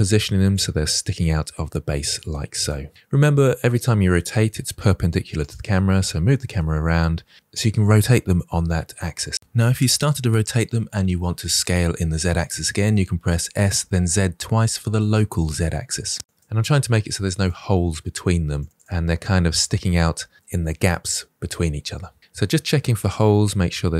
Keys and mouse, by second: 0.0-5.8 typing, 0.1 drag, 1.3-1.7 drag, 1.8 drag, 2.2 click, 2.5-2.9 drag, 3.1 drag, 4.0 click, 4.4 click, 4.8 click, 5.1 click, 5.4 middle click, 6.0 middle drag, 6.3 middle drag, 6.8 r, 7.0 click, 7.1 middle drag, 7.4 s, 7.6 drag, 7.8 g, 8.1-8.4 drag, 8.7 drag, 9.2 click, 9.5 shift+d, 10.8 s, 11.3 z, 11.4 z, 12.4 click, 12.8 g, 13.7-14.4 drag, 14.8-15.5 drag, 15.8-16.2 drag, 16.3-19.4 typing, 16.6 drag, 16.9 click, 17.7 click, 18.4 drag, 20.3 drag, 20.8 shift+d, 20.8 r, 21.0 g, 21.2-21.6 drag, 21.7 g, 21.8-22.3 drag, 22.5 click, 23.5 drag, 23.6-23.9 middle drag.